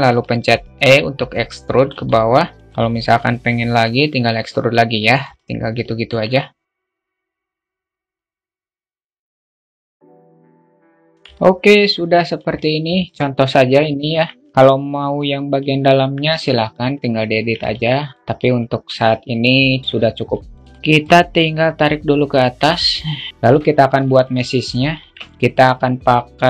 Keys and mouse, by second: 1.5 alt+middle click, 2.4-4.6 alt+middle drag, 4.9 alt+middle click, 6.7 g, 6.9 alt+middle click, 7.2 g, 7.4 alt+middle click, 7.7 click, 8.3 click, 8.4 click, 8.6 alt+middle click, 9.0 e, 9.2 middle click, 9.5 g, 9.6 alt+middle click, 10.1 alt+click, 10.2 alt+middle click, 10.4 click, 10.7 e, 10.8 alt+middle click, 11.0 alt+Tab, 11.1-11.8 alt+middle drag, 12.5-13.5 alt+middle drag, 14.6-15.1 alt+middle drag, 17.1 drag, 17.5-19.5 alt+middle drag, 19.9 alt+middle click, 21.1 click, 22.2-23.3 drag, 23.6 alt+middle click, 23.9-24.4 alt+shift+middle drag, 24.4 shift+a.